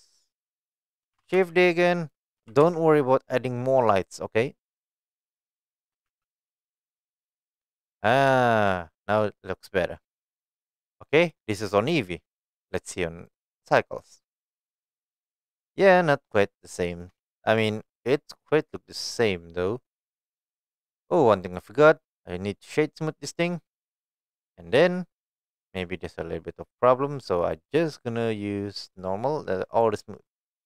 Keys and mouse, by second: 0.8 right click, 1.1 shift+d, 1.3 x, 2.1 click, 2.4 g, 2.6 y, 5.3 click, 6.0 g, 6.0 x, 6.6 click, 7.0-7.5 middle drag, 7.7 click, 8.4 shift+middle drag, 11.0-11.7 middle drag, 13.3-14.2 drag, 15.1-15.9 middle drag, 16.8-17.1 shift+middle drag, 17.3-17.8 middle drag, 18.1-18.4 shift+middle drag, 21.4 click, 22.3-23.4 right drag, 24.4 click, 25.7 click, 27.5 click, 28.8 click, 29.7 click.